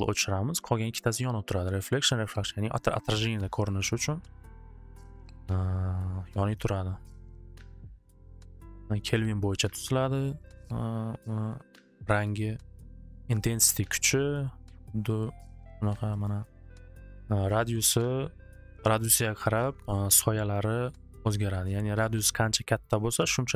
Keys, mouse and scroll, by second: 3.4 middle click, 3.7 middle click, 4.4 middle click, 10.4 right click, 13.5 click, 16.2 click, 17.9 click, 20.3 click, 22.8 click.